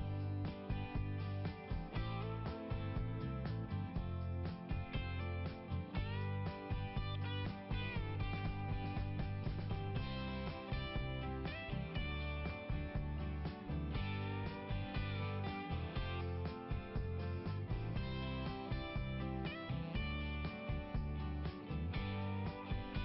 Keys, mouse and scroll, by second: 0.2 click, 5.3 click, 6.0 click, 11.5 click, 11.8 click, 13.0 click, 13.8 scroll up 1, 18.2 click, 20.5 click, 21.2 click, 22.7 scroll up 1.